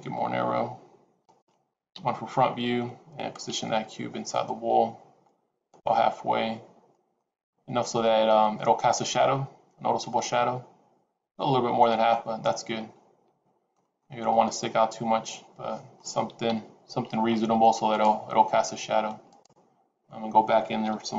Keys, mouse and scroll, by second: 1.8 KP_1, 3.4 g, 6.1-7.0 scroll up 5, 7.0 middle click, 8.1-8.5 scroll down 3, 8.5 middle click, 12.0 middle click, 13.9 middle click, 16.3 KP_1, 17.1-17.8 scroll up 2, 17.8 click, 19.2 click, 20.7 g.